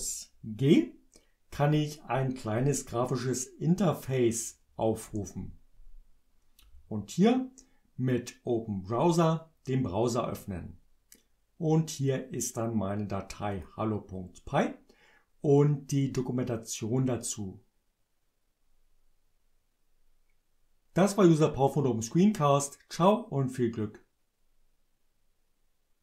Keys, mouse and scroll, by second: 5.0 Return, 9.1 click, 13.5 click.